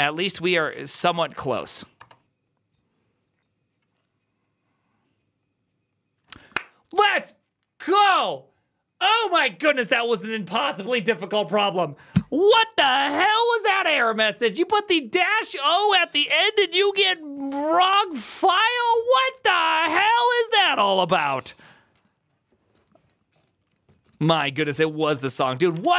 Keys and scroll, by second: 0.8 Up, 1.0 Up, 1.2 Up, 1.3 Up, 1.4 Up, 1.8 Return, 24.9-25.9 typing.